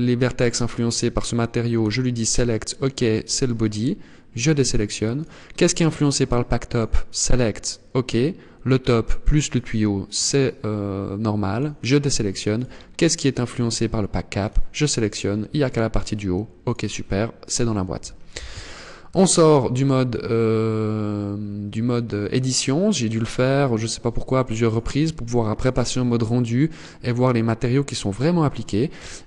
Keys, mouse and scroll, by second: 1.3 click, 3.8 click, 4.7 click, 6.2 click, 11.0 click, 12.0 click, 13.9 click, 16.1 click, 17.9 z, 18.6 Tab, 19.1-19.5 scroll down 5, 19.8-20.2 scroll up 3, 20.9-21.2 scroll down 2, 21.3-22.1 scroll up 6, 22.4 scroll down 1, 24.1 click, 28.3 KP_0.